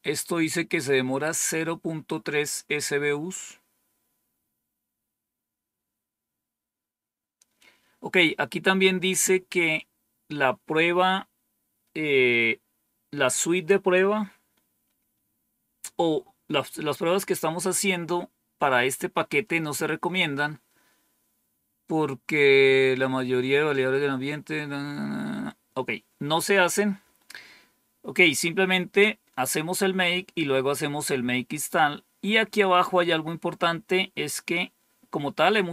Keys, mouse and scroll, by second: 1.8-3.2 scroll down 3, 3.2-4.2 scroll down 1, 4.3-4.8 scroll down 2, 4.8 scroll down 1.